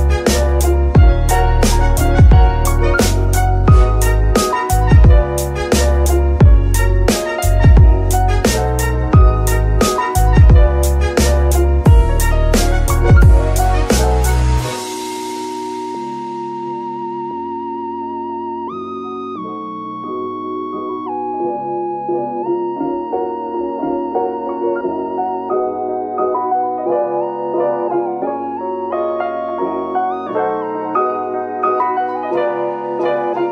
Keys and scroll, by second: 0.3 z, 8.5 ctrl+Tab.